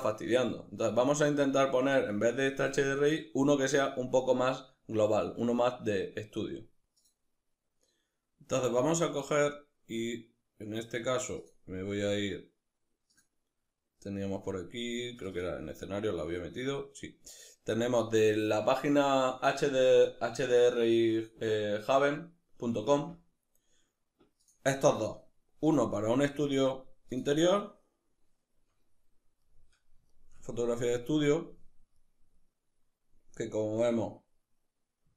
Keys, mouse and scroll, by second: 0.3-1.3 scroll up 2, 1.9-2.4 scroll up 2, 8.8-29.0 drag, 29.0-35.1 middle drag.